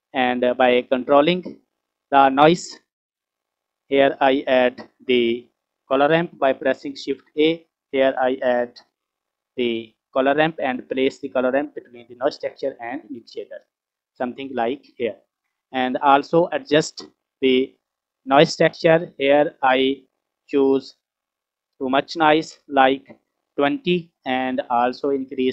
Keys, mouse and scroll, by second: 1.5 click, 2.6 scroll up 2, 3.2 middle click, 6.9 shift+a, 16.6-17.0 middle drag, 17.4 scroll up 2, 18.7 click, 19.7 click, 25.2-25.5 drag.